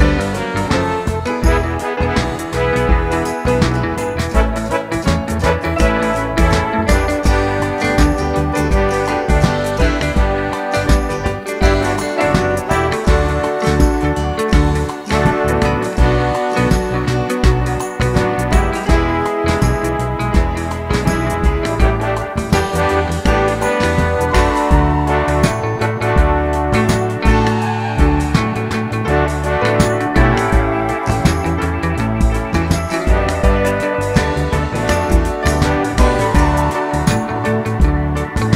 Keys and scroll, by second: 7.1 d, 21.0 super+d.